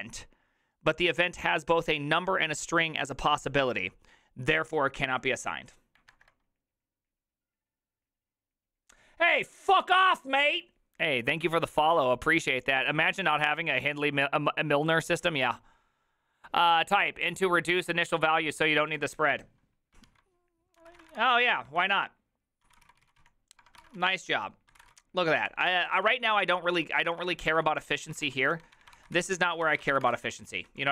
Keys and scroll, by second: 20.9-30.9 typing.